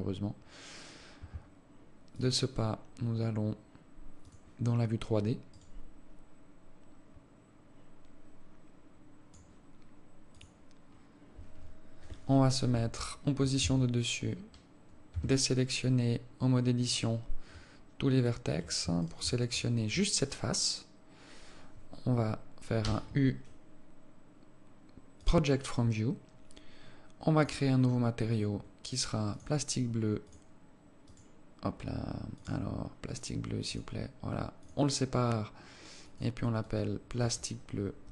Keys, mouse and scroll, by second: 6.1 right click, 11.3 scroll up 4, 13.0 KP_7, 14.0 Tab, 14.8 scroll up 2, 15.4 a, 16.4 scroll up 1, 16.6 scroll down 1, 18.6 alt+right click, 19.4 shift+right click, 23.1 u, 27.7 click, 28.2-29.6 scroll up 12, 29.6 click, 30.6 click, 31.4 click, 32.7 click, 34.9 click, 36.4 click.